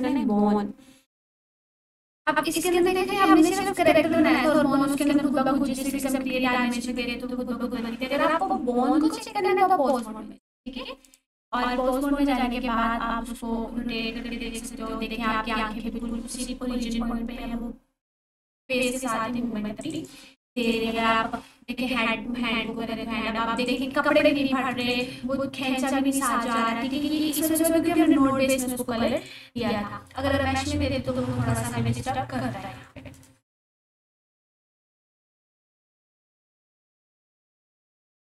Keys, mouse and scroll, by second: 1.6 alt+q, 2.8-3.4 ctrl+alt+drag, 11.8 r, 14.2-14.9 typing, 16.3-17.1 typing, 19.8 right click, 20.6 click, 20.8 r, 23.6 right click, 23.9-24.8 scroll down 1, 24.8 click, 25.1 r, 26.5 right click, 26.6-27.8 typing, 28.0 click, 29.4 r, 32.4 right click, 32.6 ctrl+z, 34.5 1, 37.3 ctrl+s.